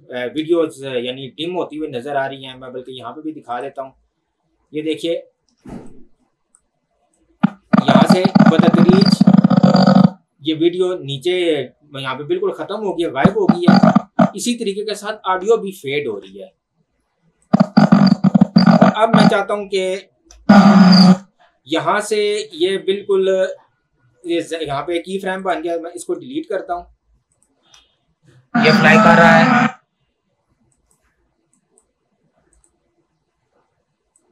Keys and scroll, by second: 15.3 ctrl+z, 20.4 space, 26.0 Delete, 27.9 space, 29.6 space.